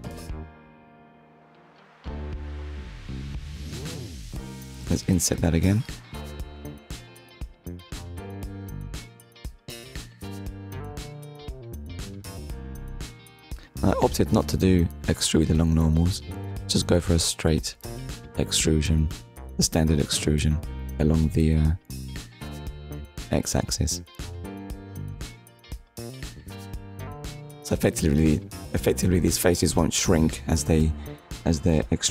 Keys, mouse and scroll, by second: 3.0 click, 8.6 click, 11.7 click, 13.6 middle click, 18.9 click, 22.3 x, 22.8 click, 29.4 middle click.